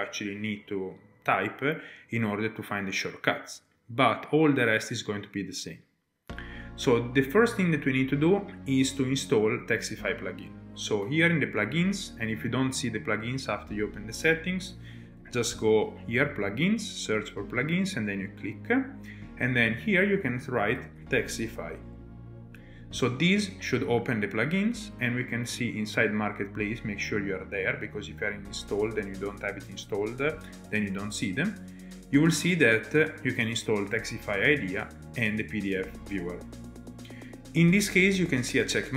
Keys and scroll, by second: 14.1-15.9 typing, 20.1-22.0 typing.